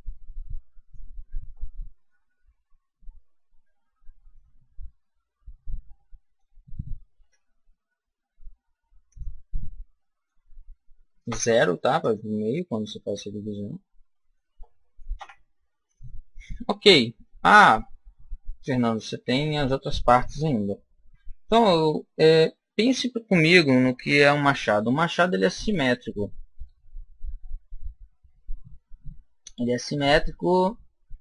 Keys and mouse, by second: 1.9-3.9 middle drag, 7.1 ctrl+r, 12.0 click, 13.9 middle click, 15.0 KP_1, 21.1 a.